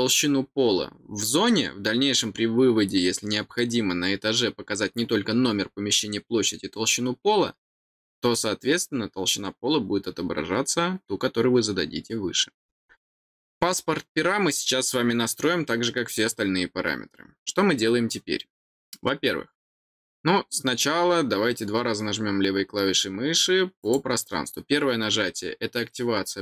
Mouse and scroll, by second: 23.8 click.